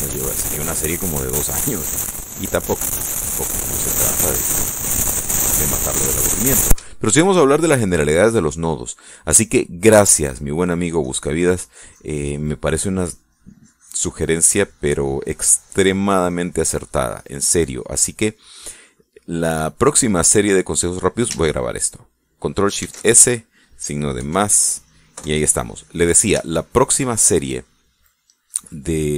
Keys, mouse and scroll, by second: 0.6-1.1 scroll down 2, 0.6 middle click, 1.1 middle click, 1.7 click, 2.8-4.6 drag, 4.8-6.6 drag, 6.6-8.1 middle drag, 8.3 shift+middle click, 11.3-17.3 drag, 17.4 middle click, 17.9-21.7 drag, 20.5-21.7 middle drag, 23.6 ctrl+shift+s, 24.9 KP_Add, 25.9 KP_Enter, 27.2 shift+click, 27.9-29.1 shift+middle drag.